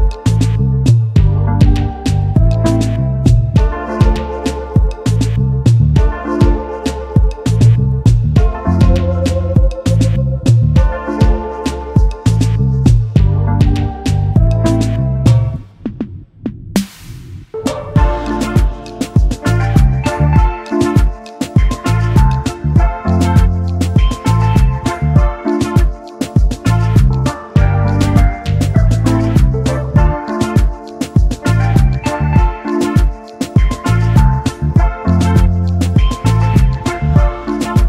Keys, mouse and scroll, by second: 4.7 space, 4.8 double click, 8.0 ctrl+c, 8.6 double click, 11.9 double click, 12.3 typing, 16.7 double click, 22.4 double click, 23.4 typing, 24.9 double click, 26.6 space, 29.6 ctrl+x, 30.7 alt+scroll up 1, 30.9 space, 31.6 double click, 31.9 alt+scroll down 1, 31.9 space, 32.4 alt+scroll down 1, 32.6 space.